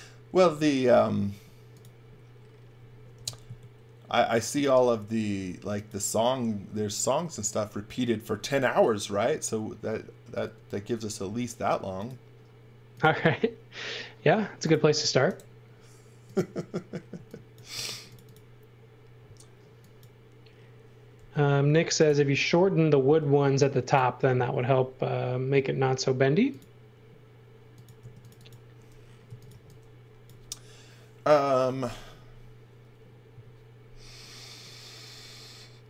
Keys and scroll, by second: 1.3 space, 3.1 m, 11.2 r, 14.8 space, 17.1 x, 17.7 space, 21.2 m, 23.0 space, 24.6 m, 28.0 space, 29.0-30.0 typing.